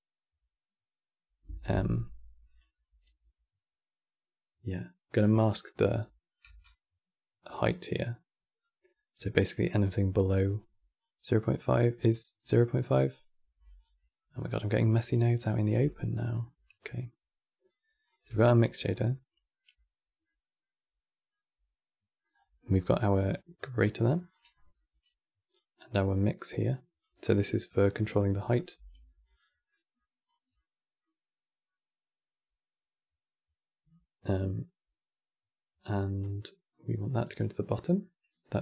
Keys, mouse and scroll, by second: 6.1 q, 10.2 click, 10.7 click, 11.7-12.7 drag, 13.5 scroll down 3, 13.7-14.9 middle drag, 14.9 click, 15.4 g, 16.1-16.6 middle drag, 16.6 click, 17.8 click, 18.0 g, 21.3 middle click, 22.0-23.0 scroll up 11, 22.3 middle drag, 23.0 click, 24.2-25.2 middle drag, 25.2-26.9 drag, 26.9 scroll down 2, 27.0 middle click, 27.7 click, 28.2 click, 28.5 g, 29.4 middle click, 30.0 scroll down 1, 30.3-34.4 middle drag, 35.9 click.